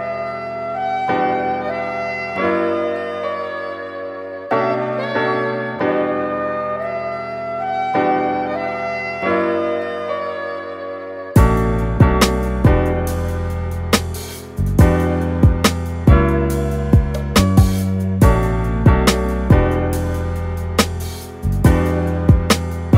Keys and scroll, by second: 12.8 super+z.